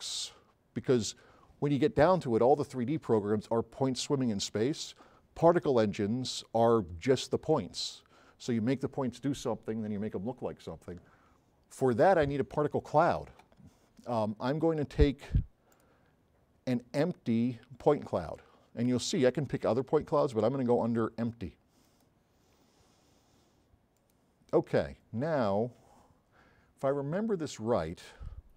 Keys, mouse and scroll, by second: 15.8 click.